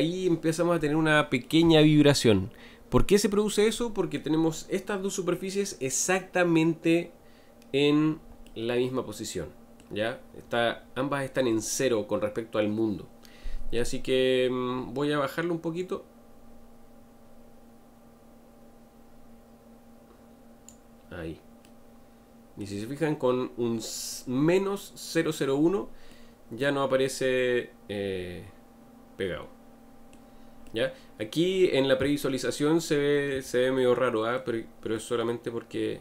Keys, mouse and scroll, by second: 17.2-19.0 drag, 21.6-29.1 middle drag, 30.6-36.0 middle drag.